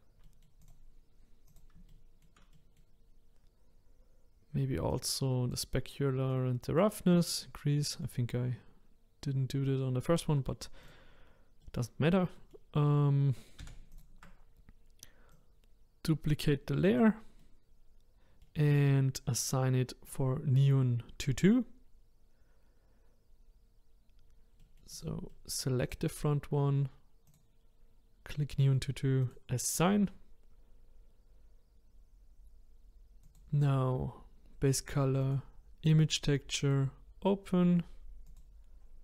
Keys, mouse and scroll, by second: 0.2 middle click, 0.6 click, 1.0-1.6 scroll up 2, 1.6 click, 1.9-3.1 shift+middle drag, 3.1-5.1 scroll down 1, 5.1-7.3 drag, 7.8-10.9 middle drag, 10.9 click, 11.6-13.6 middle drag, 13.6 shift+d, 15.5 click, 17.4-20.1 middle drag, 20.1 click, 24.6 middle click, 24.9 click, 25.3 middle click, 25.9 click, 27.3 click, 29.3-39.0 drag.